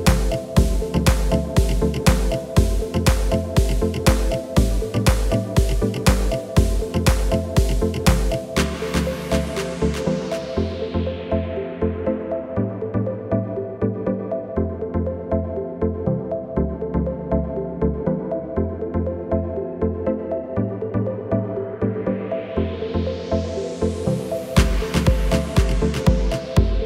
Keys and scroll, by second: 15.4 ctrl+z.